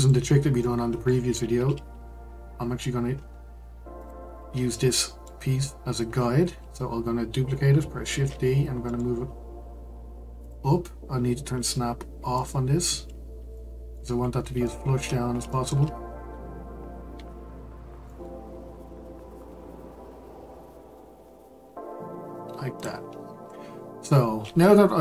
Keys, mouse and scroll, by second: 0.0 click, 0.6-3.6 middle drag, 4.0 click, 4.4-4.9 scroll up 2, 4.9-6.1 shift+middle drag, 6.1-8.1 scroll up 2, 8.1 shift+d, 12.3 click, 13.0-13.5 scroll up 2, 13.5-14.1 shift+middle drag, 14.1-14.6 scroll up 2, 14.6-15.2 shift+middle drag, 15.2-15.5 scroll up 1, 15.5-17.1 shift+middle drag, 17.1 g.